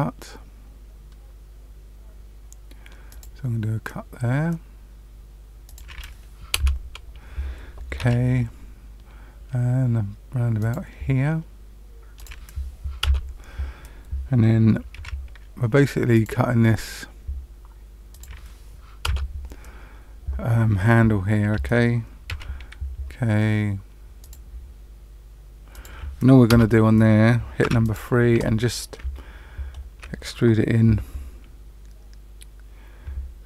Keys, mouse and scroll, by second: 7.9 k, 14.9 k, 22.2 k, 27.6 3, 27.8 click, 28.4 middle click, 29.1 shift+middle click.